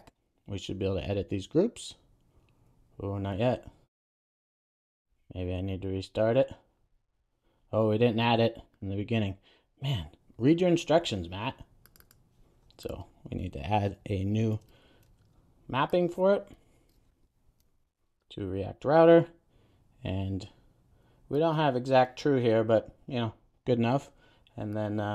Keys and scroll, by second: 7.2 super+s, 14.7 super+d, 18.6 super+s.